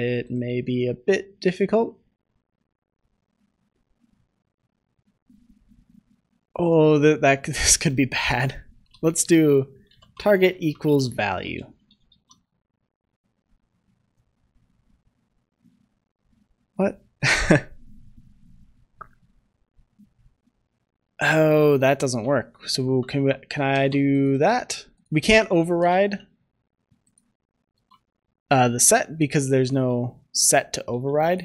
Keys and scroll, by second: 12.0 ctrl+s, 22.1 ctrl+c, 22.9 ctrl+v, 23.6 ctrl+s, 27.6 ctrl+s, 29.6 ctrl+z, 30.1 ctrl+z, 30.8 ctrl+z, 31.2 ctrl+z.